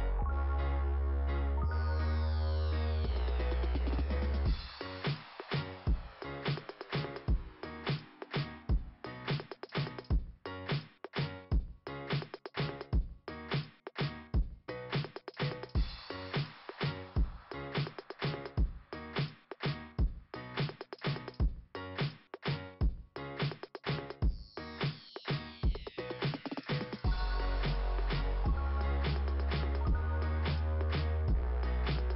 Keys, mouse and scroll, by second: 0.2 click, 4.0 click, 7.0 click, 10.2 click, 10.4 click, 16.3 click, 29.7-30.1 scroll down 2, 30.5 click.